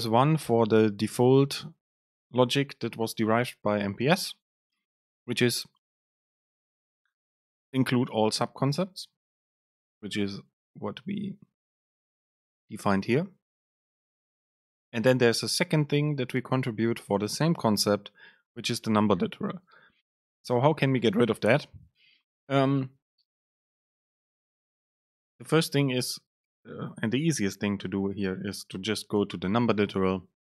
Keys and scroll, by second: 29.3 super+b.